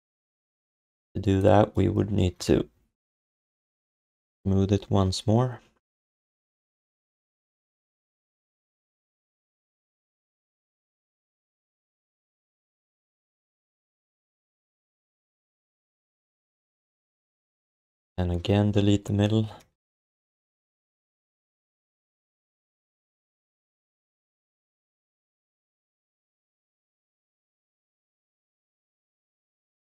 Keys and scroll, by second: 8.4 1, 12.5 q, 13.4 alt+shift+d, 13.7 ctrl+s, 16.3 alt+q, 17.4 4, 22.9 alt+shift+d, 24.0 alt+q, 25.4 5, 26.6 f, 27.6 alt+q, 28.0 alt+q, 29.0 f.